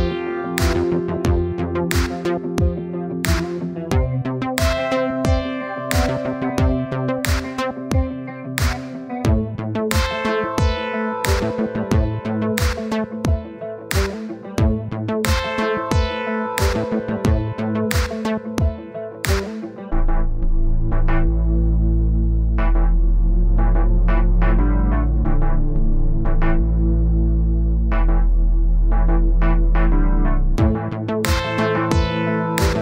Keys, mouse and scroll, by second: 0.8-1.9 drag, 1.9 scroll down 2, 2.1-2.4 scroll up 1, 2.4-3.8 drag, 3.8 middle click, 4.2 scroll up 2, 4.4 middle click, 5.0-6.1 drag, 6.1 scroll down 2, 6.2 middle click, 6.7-8.4 drag, 8.4 middle click, 8.9 click, 9.7 middle click, 10.0 click, 10.5-11.7 middle drag, 12.1-12.4 scroll down 1, 12.4-12.8 scroll up 1, 12.8-17.4 drag, 17.4-19.1 middle drag, 19.1-20.9 drag, 20.9 middle click, 21.2 click, 21.7 middle click, 22.2-23.6 drag, 23.6 middle click, 24.4 click, 25.1 middle click, 25.8 click, 26.3 middle click, 26.4 scroll down 1, 26.7-28.3 drag, 28.3-29.3 middle drag, 29.3-30.8 drag, 30.8 middle click, 31.3 click, 31.8 middle click, 32.6-32.8 drag.